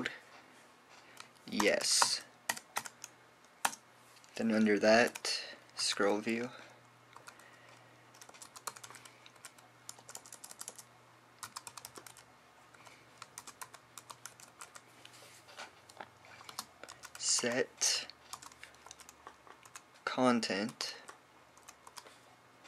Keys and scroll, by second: 0.6 typing, 2.1-3.6 typing, 5.6-6.6 typing, 8.0 typing, 9.2-16.0 typing, 17.5-20.5 typing, 21.5-22.6 typing.